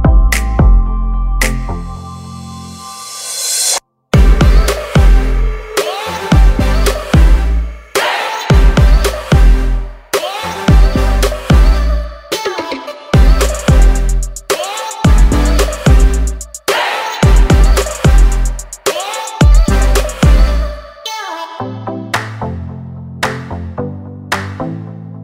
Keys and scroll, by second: 8.6 ctrl+d.